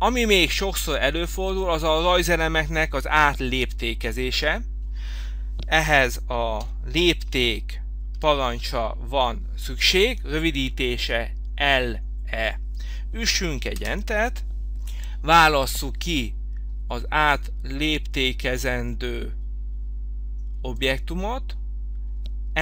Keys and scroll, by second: 6.6 l, 13.8 Return.